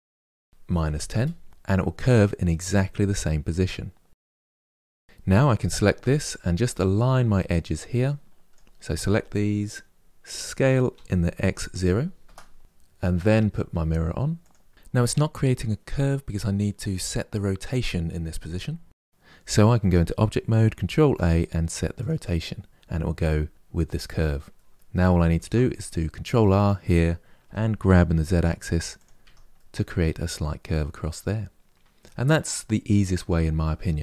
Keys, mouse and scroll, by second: 3.4-4.9 middle drag, 4.9 click, 5.7 Tab, 6.5-7.7 middle drag, 7.7 click, 10.7 s, 12.9-14.7 drag, 19.5 Tab, 20.6 ctrl+a, 23.6 Tab, 24.3 middle click, 25.1 ctrl+r, 27.2 g, 28.9 Tab, 29.3-31.7 middle drag.